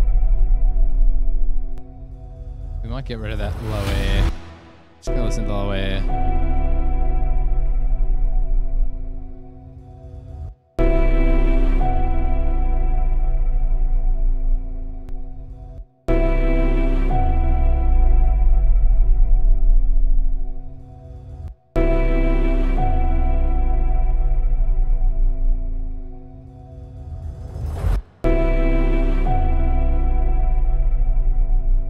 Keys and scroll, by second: 3.7 super+=, 6.7 super+=, 10.7 space, 10.9 space, 16.0 space, 16.2 space, 21.7 space, 21.8 space, 28.2 space, 28.3 space.